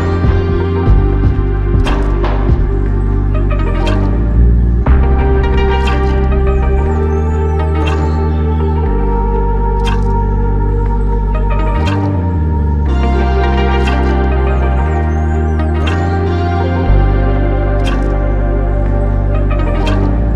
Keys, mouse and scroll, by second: 0.5 ctrl+alt+click, 1.9 alt+click, 5.1-5.6 scroll up 1.